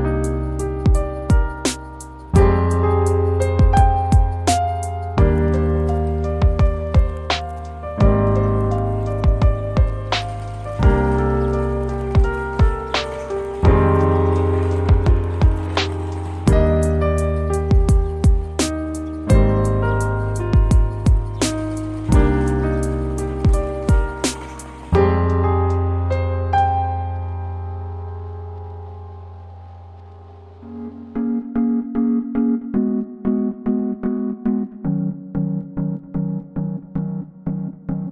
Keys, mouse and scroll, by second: 18.6 shift+a, 19.5 scroll up 1, 22.4 scroll up 1, 22.4 middle click, 26.3 scroll down 1, 31.8 middle click, 32.1 shift+a.